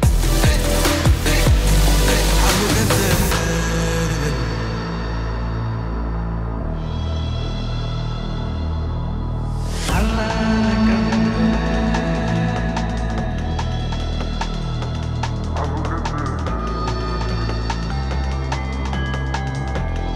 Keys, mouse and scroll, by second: 0.0-2.4 typing, 2.4 Return, 4.3 typing, 4.8 click, 6.2 typing, 7.5 scroll up 1, 9.1-10.4 drag, 12.6-13.5 typing, 14.4 scroll up 1, 15.5 scroll down 1, 17.0 click, 18.1-19.7 typing, 20.0 Return.